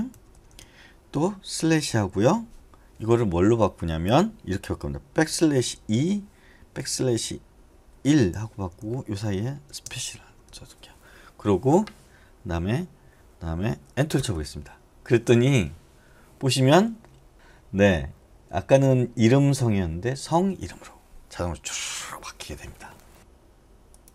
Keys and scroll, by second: 1.8 /, 5.2 \, 5.9 2, 6.8 \, 8.0 1, 8.6 Left, 8.8 Left, 10.5 Right, 14.1 Return.